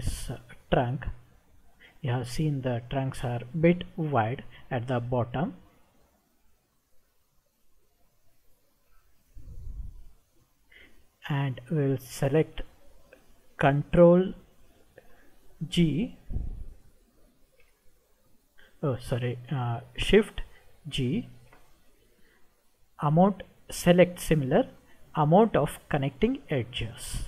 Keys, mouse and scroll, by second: 5.3-8.5 middle drag, 9.3 scroll down 2, 17.3 ctrl+g, 21.3 shift+g.